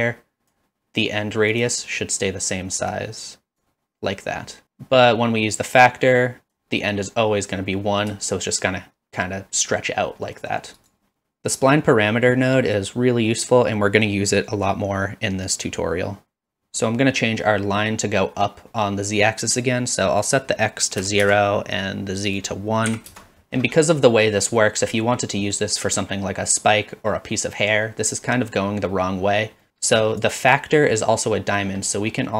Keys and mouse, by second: 3.0-3.6 drag, 5.6-6.6 drag, 8.4-10.9 shift+drag, 20.3-21.8 drag, 22.4 click, 23.4 shift+middle drag, 24.1 middle drag, 24.6 shift+middle drag, 29.6 middle click, 30.0 click, 32.0 middle click.